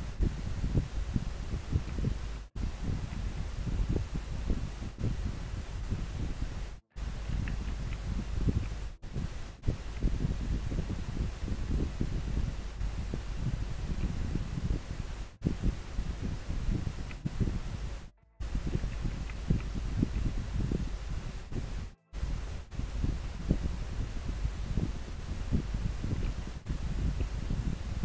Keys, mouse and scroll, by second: 3.1 scroll down 1, 8.0 scroll down 1, 10.0 scroll up 1, 19.3 scroll down 1, 20.3 scroll up 1, 27.3 scroll up 1.